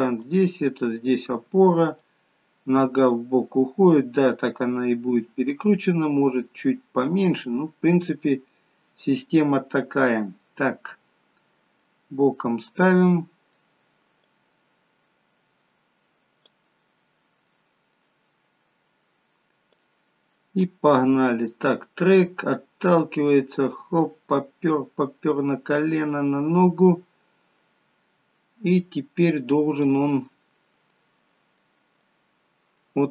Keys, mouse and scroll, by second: 3.9 middle click, 3.9-4.4 scroll down 2, 4.4 middle click, 11.0 middle click, 11.9-12.3 scroll down 3, 12.3 middle click, 14.6 click, 17.1 scroll up 4, 17.5 middle click, 18.0 scroll up 1, 18.3-19.2 scroll down 2, 19.9 click, 30.5 scroll up 3, 30.8 middle click, 32.1 middle click.